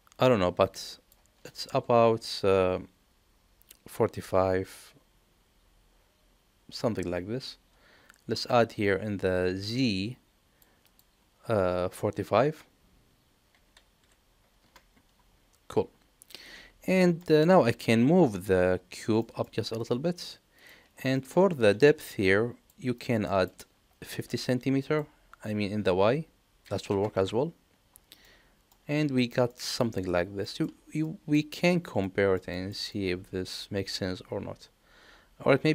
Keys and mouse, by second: 9.7 click, 10.8 click, 17.0 shift+middle click, 18.9 g, 21.1 middle drag, 24.8-27.9 drag, 28.2-28.7 middle drag, 29.2 shift+middle click, 29.5 middle click, 30.5 shift+middle click, 31.0 middle click, 32.1 middle click, 32.5 shift+middle click, 32.9-35.7 middle drag.